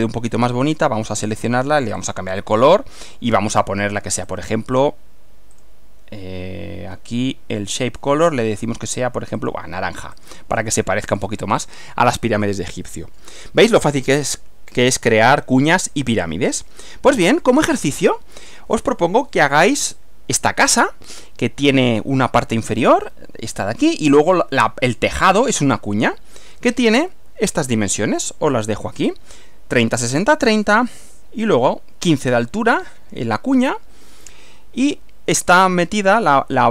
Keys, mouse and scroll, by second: 0.8 right click, 2.0 click, 2.6 click, 4.3 click, 5.6 click, 7.9 click, 9.5 click, 10.2 click, 11.1 click, 11.6 click, 12.9 middle click, 13.7-15.9 middle drag, 17.3 click, 27.0 Right.